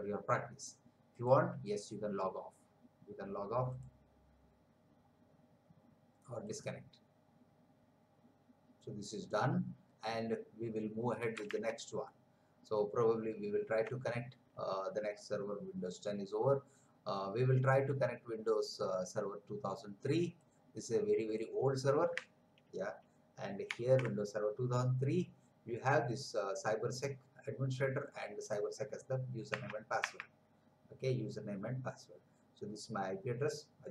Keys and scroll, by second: 11.6 alt+Tab, 23.7 ctrl+c, 29.5 Tab.